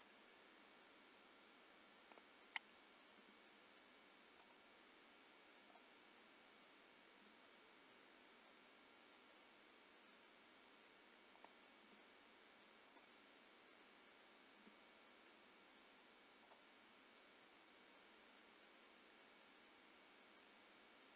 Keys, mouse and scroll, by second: 0.4-1.3 scroll down 4, 1.3 middle click, 2.1 click, 3.2 r, 5.7 click, 7.3 g, 11.8 g, 14.6 r, 17.1-17.5 scroll down 3, 17.5 middle click, 19.1 middle click.